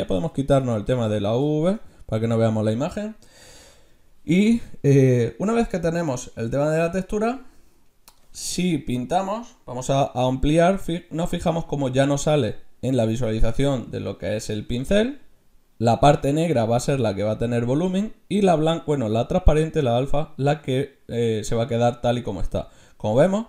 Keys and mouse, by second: 1.1 middle click, 1.5-3.8 middle drag, 10.0 f.